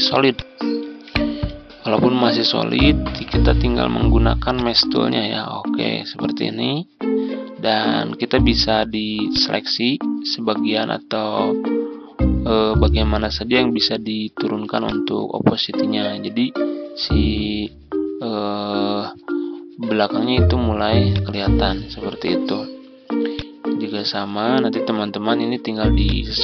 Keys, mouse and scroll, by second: 0.2 click, 0.7 Tab, 1.2 Tab, 1.6 ctrl+scroll up 1, 4.4-26.4 drag.